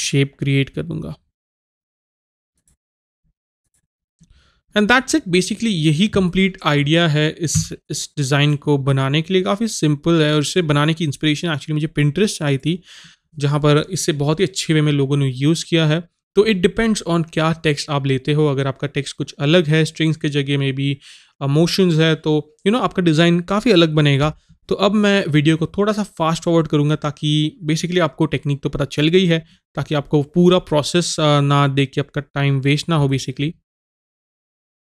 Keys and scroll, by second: 7.6 a.